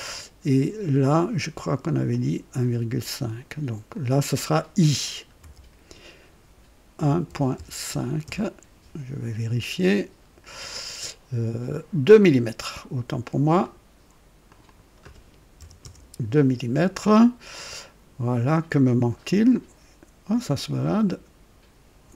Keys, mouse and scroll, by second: 2.0-2.8 drag, 3.9 click, 5.1-8.2 typing, 8.2 KP_Enter, 9.8 click, 12.1 click, 13.6 click, 14.5 click, 15.6 typing, 15.8 KP_Enter, 19.5-21.0 drag.